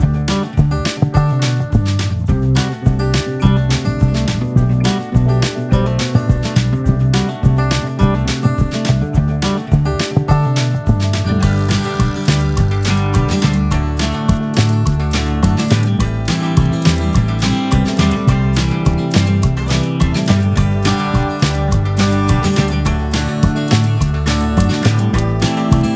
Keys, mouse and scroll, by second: 0.2 shift+d, 1.4-2.9 drag, 3.6 scroll up 4, 3.8-4.8 drag, 4.9 drag, 6.7-9.5 drag, 9.7-13.1 drag, 13.6-16.9 drag, 18.0 click, 20.0-20.5 drag, 21.7 drag, 22.0 middle click, 22.4-23.5 drag, 24.1 click, 24.6-25.2 scroll down 10, 25.2-25.9 scroll down 21.